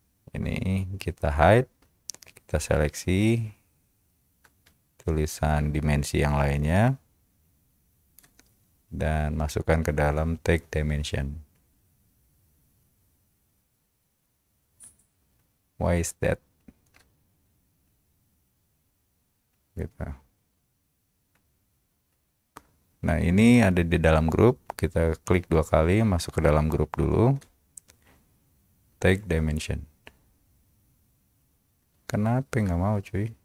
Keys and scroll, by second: 3.7 Return.